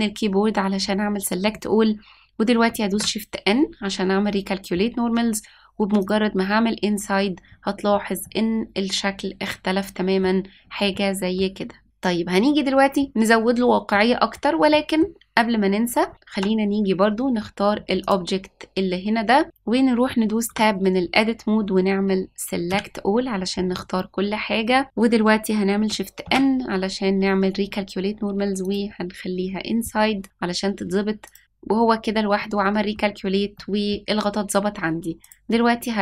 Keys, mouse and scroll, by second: 2.8 shift+n, 6.1 click, 8.2-10.2 middle drag, 10.6 scroll down 1, 10.8 middle click, 11.9-12.3 scroll up 1, 13.9 middle click, 14.7 middle click, 16.3 Tab, 18.0 click, 19.4 shift+middle click, 19.4-20.4 scroll up 1, 20.4 Tab, 22.6 a, 26.2 shift+n, 28.7 click, 31.2 click, 31.4 shift+n, 32.3 middle click, 33.5 middle click, 35.2-36.0 drag.